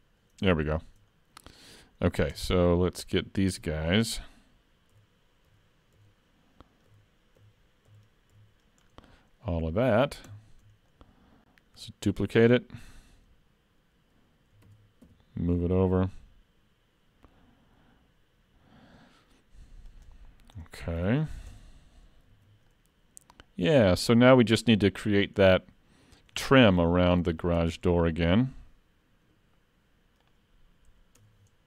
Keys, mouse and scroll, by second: 0.7 shift+middle click, 1.2-1.6 scroll up 1, 1.6 middle click, 2.3 Tab, 2.6-3.7 scroll down 3, 3.7-4.2 scroll up 2, 5.0-8.4 typing, 8.9-9.5 scroll down 1, 9.5-10.3 scroll down 2, 10.3 scroll down 2, 10.3 KP_3, 10.9 shift+middle click, 14.7 shift+d, 20.3-20.6 scroll up 3, 20.6 middle click, 21.1 alt+a, 21.3-22.2 scroll down 4, 21.5 Tab, 22.4 alt+a, 22.7 middle click, 23.9 scroll up 2, 26.4-27.1 shift+scroll up 4, 26.8 shift+middle click, 27.2 shift+middle click, 27.6 middle click, 30.3 click, 31.2 Tab.